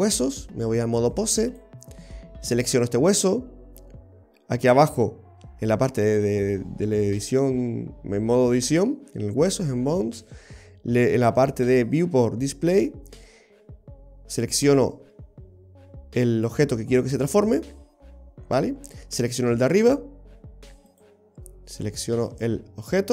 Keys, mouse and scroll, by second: 0.1 right click, 1.0 click, 2.6 right click, 4.7 click, 19.2 right click, 20.9 click.